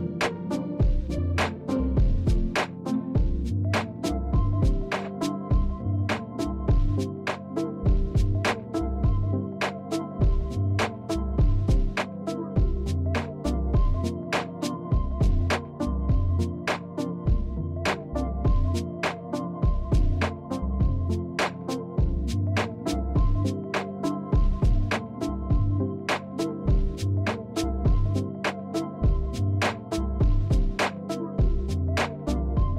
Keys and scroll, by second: 13.9 space, 26.1 space, 32.2 space.